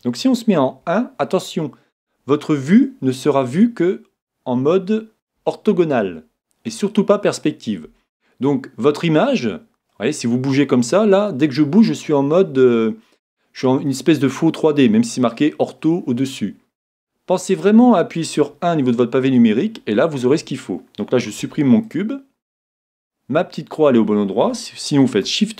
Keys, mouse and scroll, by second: 0.8 KP_1, 5.4 KP_5, 9.9-11.8 middle drag, 12.9-18.5 middle drag, 18.5 KP_1, 21.4 x, 21.9 x, 25.0 shift+c.